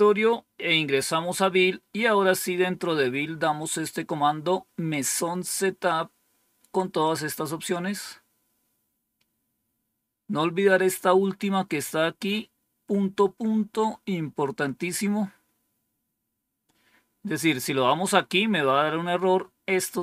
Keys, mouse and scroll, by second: 1.7-2.5 scroll down 2, 2.5-3.2 scroll down 1, 6.9-20.0 drag.